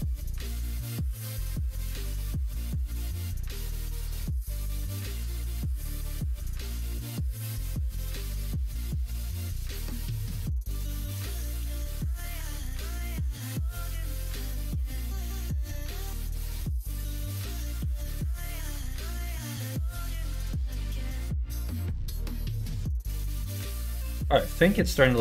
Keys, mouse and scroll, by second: 0.2-2.9 middle drag, 3.3 middle click, 4.1 middle click, 5.0 middle click, 5.8 alt+click, 6.4 click, 6.6 middle click, 8.3 g, 10.1 ctrl+z, 10.8 g, 12.9 alt+click, 14.0 click, 14.6 ctrl+click, 15.3 g, 18.3 click, 18.8 middle click, 19.2 Tab, 20.4-22.0 middle drag, 22.9 middle click, 23.6 middle click.